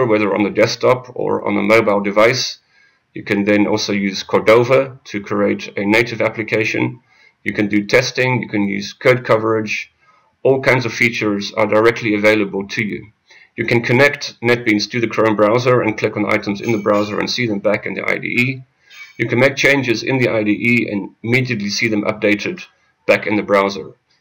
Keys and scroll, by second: 4.7 F6.